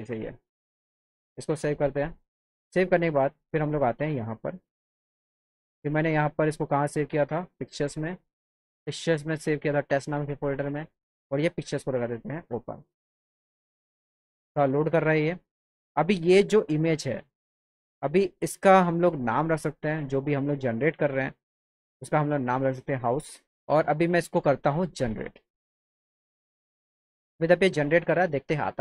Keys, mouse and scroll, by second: 0.9 click, 2.5 click, 4.7 click, 7.8 click, 9.3 scroll up 1, 9.7 click, 9.8 click, 10.3 scroll up 1, 10.8 click, 12.3 click, 17.3 click, 20.0 click, 22.7 click, 25.4 click.